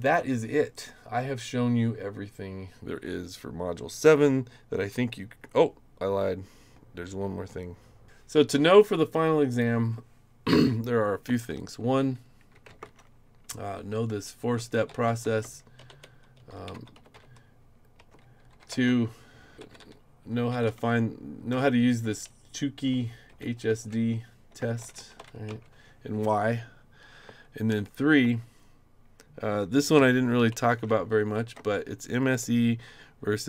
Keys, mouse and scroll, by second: 0.0 click, 0.6-1.8 scroll up 5, 0.7 click, 0.8 middle click, 9.5 click, 12.3-22.0 typing, 17.9 Return, 23.0-25.7 typing, 27.7 3, 28.0 ., 28.2 space, 29.7-31.9 typing.